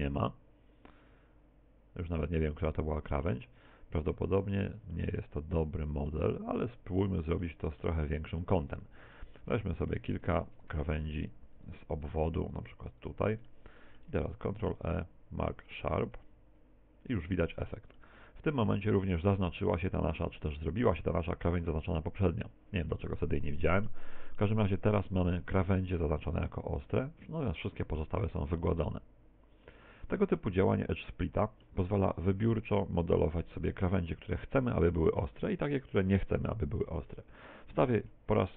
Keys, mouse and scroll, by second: 3.7 middle click, 4.3 middle click, 5.0 middle click, 6.4 Tab, 6.8 scroll down 3, 7.4 middle click, 8.2 middle click, 8.7-9.0 scroll up 6, 9.2 shift+middle click, 9.9 shift+right click, 10.6 right click, 11.1 shift+right click, 11.6 shift+right click, 12.0 right click, 12.6 shift+right click, 13.0 shift+right click, 13.5 middle click, 14.4 ctrl+e, 17.2 Tab, 18.0 middle click, 19.3 middle click, 20.6 middle click, 23.0 middle click, 24.4 middle click, 29.8-30.4 scroll down 6, 30.4 middle click, 36.0 x, 37.4 KP_1, 38.4 shift+middle click.